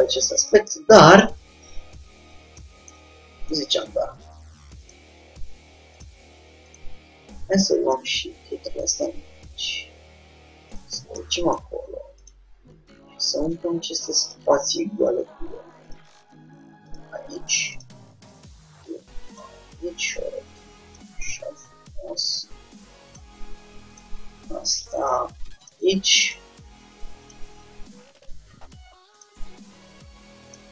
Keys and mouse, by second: 0.8-2.1 middle drag, 2.5-5.1 middle drag, 5.1-8.1 drag, 8.1 shift+d, 11.6-12.9 middle drag, 12.9 g, 15.3 r, 16.1 click, 16.2 g, 18.1 g, 19.9 r, 21.1 click, 21.5 g, 24.1-25.9 drag, 24.2 g, 26.5-28.0 drag, 26.6 g, 27.6 r, 29.6 g.